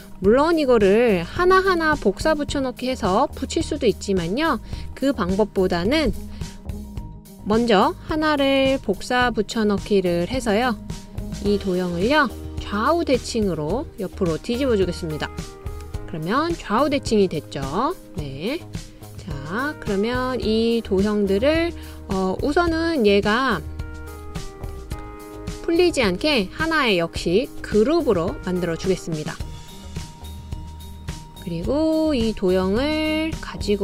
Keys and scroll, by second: 2.1 super+c, 2.4 super+v, 2.6 super+v, 3.0 super+v, 6.6 BackSpace, 9.4 super+c, 9.7 super+v.